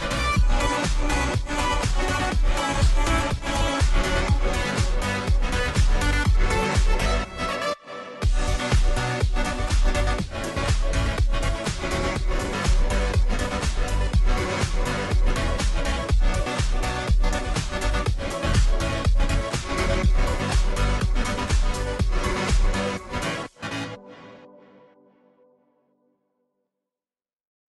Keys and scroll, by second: 0.0-27.7 typing.